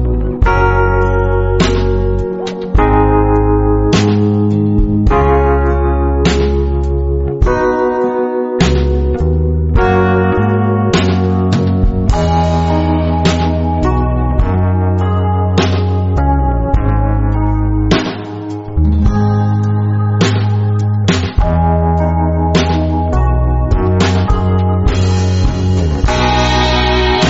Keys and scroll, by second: 4.2 i, 7.4 space, 7.9 super+space, 8.0 super+space, 8.5-10.8 super+space, 9.3-10.8 typing, 16.8 a, 19.0-20.1 typing, 23.5 space, 26.8 space.